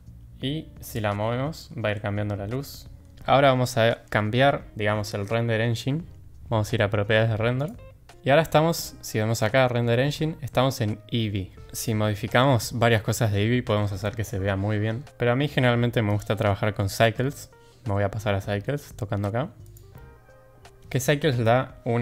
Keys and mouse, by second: 1.6 g, 7.6 click, 16.1-19.8 drag.